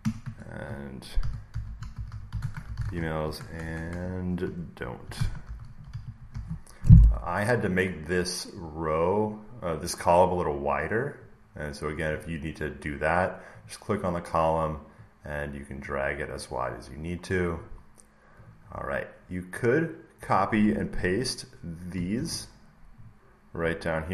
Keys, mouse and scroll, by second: 0.0-6.7 typing, 0.1 Return, 8.5 click, 10.6 click, 11.8 click, 12.6 click, 13.3-15.6 drag, 17.2 click, 18.3 click, 20.1 click, 21.8 ctrl+c, 22.9 click, 24.0 ctrl+v.